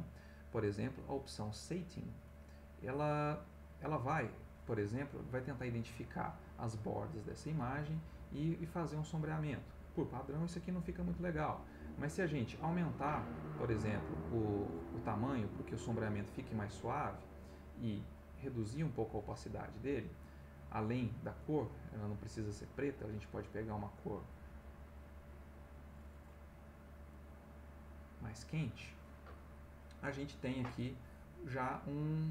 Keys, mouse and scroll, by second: 1.2 click, 12.6-13.8 drag, 17.8 click, 21.7 click, 23.3 click, 25.8 click, 27.1 click, 30.8-32.3 drag.